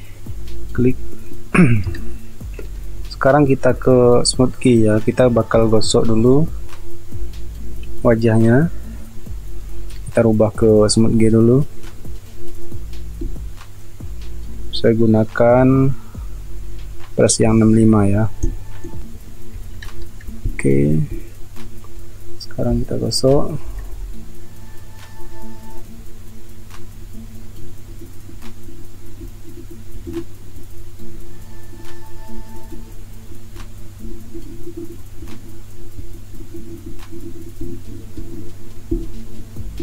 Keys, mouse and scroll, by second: 1.6 space, 2.8 space, 5.2 space, 7.2-8.1 typing, 19.8 ctrl+alt+z, 20.3 space, 23.2-23.9 typing, 29.9 space, 38.8 space.